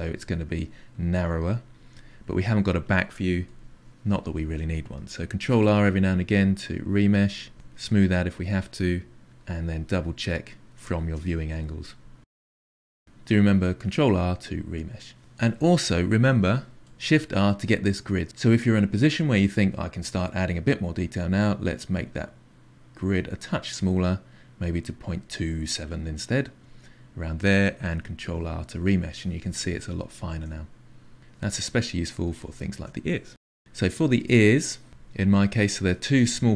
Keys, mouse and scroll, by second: 0.1 click, 0.4 click, 0.9 click, 1.7-4.4 drag, 5.3 ctrl+r, 6.4-7.6 drag, 7.7 middle click, 7.9 KP_3, 8.2 ctrl+shift+middle click, 8.8 click, 9.2 click, 9.6 f, 9.7 click, 9.8-10.6 Left, 10.3 click, 10.7 shift+Left, 10.8 shift+Left, 10.9 shift+Left, 11.4 f, 11.5 click, 12.3 click, 12.7 shift+click, 13.1-14.1 shift+drag, 14.1 ctrl+r, 14.4 click, 15.2-16.9 ctrl+middle drag, 16.9 shift+r, 28.2 ctrl+r, 30.1 shift+middle click, 31.0-32.9 drag, 32.9-34.1 ctrl+shift+middle drag, 34.1 f.